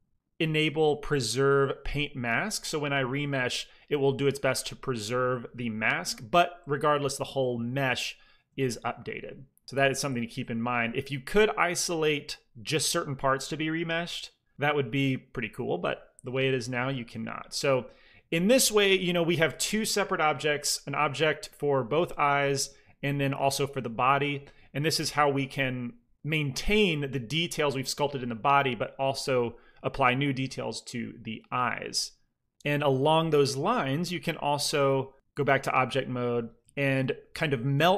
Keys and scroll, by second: 3.1 ctrl+r, 5.1 f, 15.1 alt+m, 15.9 f, 16.5 shift+c, 16.7 f, 36.6 shift+a.